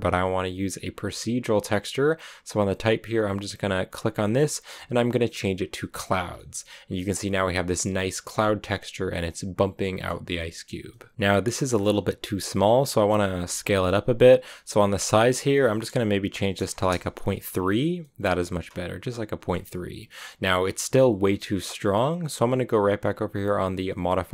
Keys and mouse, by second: 3.9-5.7 drag, 6.2-7.8 middle drag, 9.6 middle click, 10.2 middle click, 11.0-11.7 middle drag, 14.9-17.6 drag, 17.6 BackSpace, 17.8-19.7 drag.